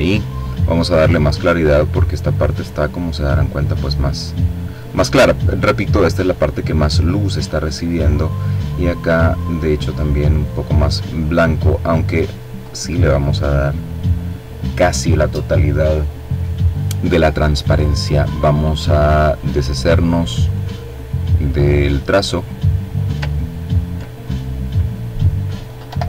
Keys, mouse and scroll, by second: 6.5 click, 8.1-10.1 drag, 11.4-13.3 drag, 18.2 click, 19.3 click, 20.3 click, 21.2 click, 22.3-22.8 ctrl+scroll down 2, 23.1 ctrl+click, 24.7 Delete.